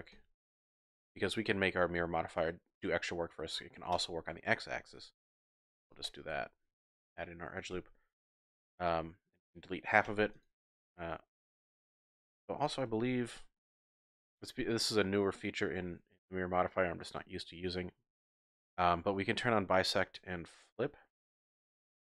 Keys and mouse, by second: 0.1 ctrl+z, 0.5 ctrl+z, 0.9 ctrl+z, 3.9 click, 5.3 ctrl+r, 6.0 click, 7.8 z, 9.1 click, 10.1 x, 12.9 ctrl+z, 13.6 ctrl+z, 14.1 click, 21.2 click, 21.9 ctrl+z.